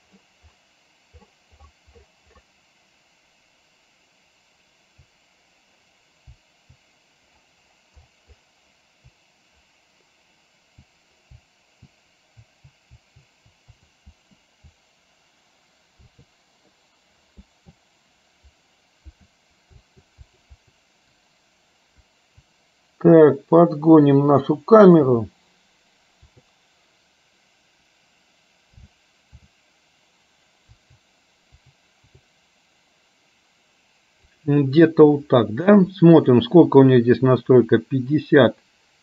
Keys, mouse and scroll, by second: 36.2 click, 37.7-39.0 drag.